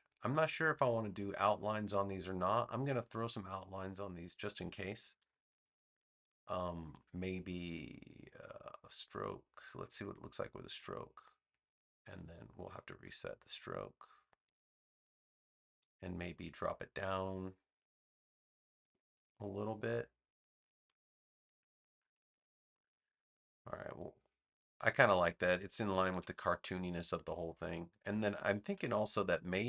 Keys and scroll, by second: 5.1 BackSpace, 18.5 3, 18.8 Return, 21.9 2, 22.2 Return, 26.0 super+-, 27.0 space.